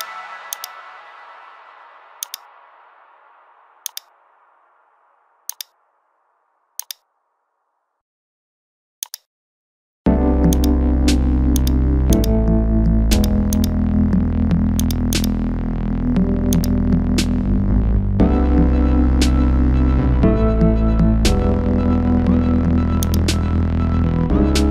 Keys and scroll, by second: 24.3 ctrl+shift++.